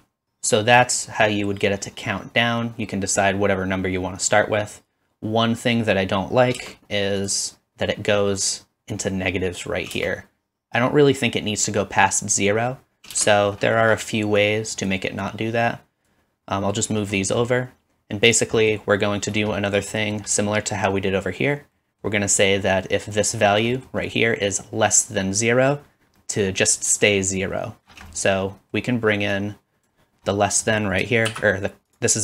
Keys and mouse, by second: 6.6 space, 9.9 space, 13.1 space, 18.3-19.6 middle drag, 19.6-23.3 drag, 23.3-29.4 middle drag, 29.4-31.9 drag, 31.3 shift+d, 31.9-32.2 middle drag.